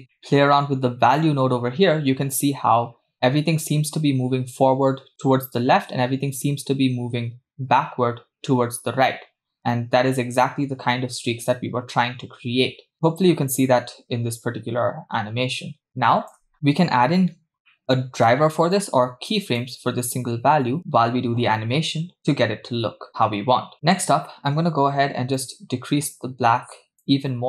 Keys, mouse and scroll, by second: 0.0 click, 0.0 scroll up 4, 0.1 middle click, 1.2-16.5 shift+drag, 17.1-17.7 scroll up 2, 17.7 middle click, 17.8 scroll up 1, 18.2 click, 18.8 click, 23.6-24.0 scroll down 6, 23.7 middle click, 24.4-25.3 scroll up 3, 25.4-27.1 drag.